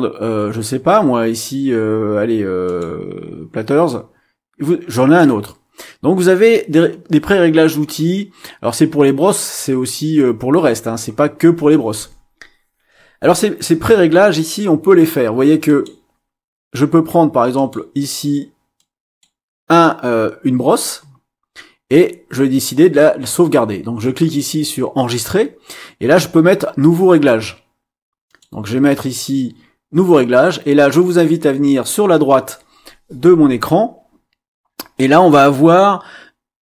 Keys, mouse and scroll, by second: 2.6 click, 3.8-5.4 drag, 15.6 click, 17.6 click, 18.8 click, 19.8-21.0 drag, 24.0 click, 28.3 click.